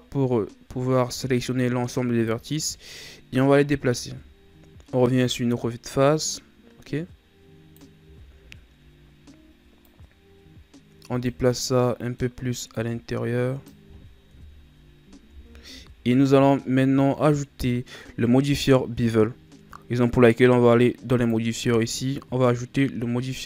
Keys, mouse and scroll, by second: 3.8 KP_1, 6.3-8.0 drag, 8.0 z, 9.8-11.4 drag, 11.4-12.6 middle drag, 12.6-14.4 drag, 14.4 KP_1, 15.2 Tab, 21.1-23.4 drag.